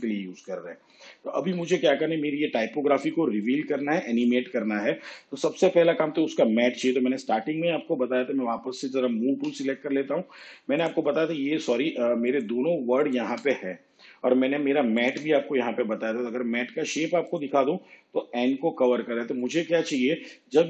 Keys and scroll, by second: 9.4 v.